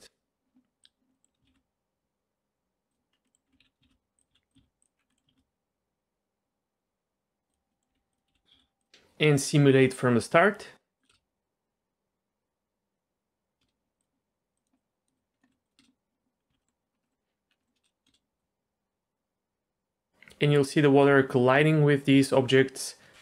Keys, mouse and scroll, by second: 0.8 click, 1.1 middle click, 1.5 shift+a, 3.1 scroll up 2, 3.2 middle click, 3.5 g, 4.3 s, 4.6 ctrl+a, 5.0 scroll down 1, 5.1 middle click, 5.3 shift+a, 7.7 middle click, 7.9 g, 8.5 s, 11.0 click, 11.1 space, 13.6 space, 14.0 click, 14.7 click, 15.3 click, 15.5 Delete, 15.6 click, 15.8 space, 16.5 z, 16.6 middle click, 16.9 scroll up 1, 17.0 middle click, 17.5 scroll up 1, 17.6 middle click, 18.1 space, 18.4-23.2 drag.